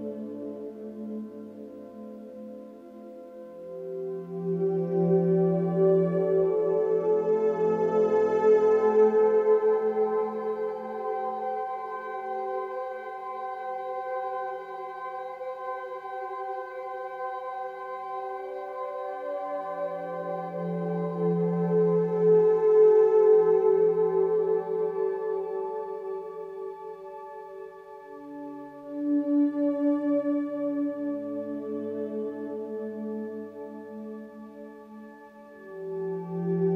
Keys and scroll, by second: 1.7 ctrl+=, 7.5 ctrl+z, 13.6 ctrl+z, 18.6 ctrl+alt+z, 27.8 ctrl+z.